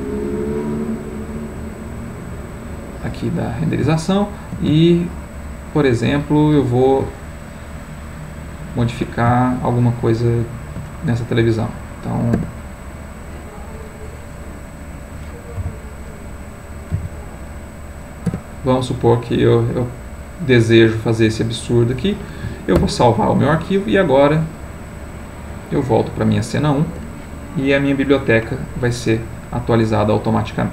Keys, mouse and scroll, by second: 2.9-11.2 middle drag, 11.6-15.6 drag, 15.6 i, 19.8-24.1 middle drag, 24.3-27.5 drag, 29.3-30.7 middle drag.